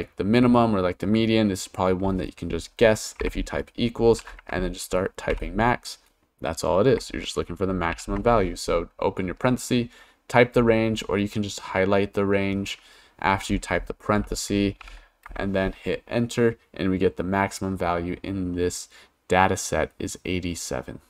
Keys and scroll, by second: 3.2-5.3 typing, 7.9 shift+9, 14.8 shift+0, 15.3 Return.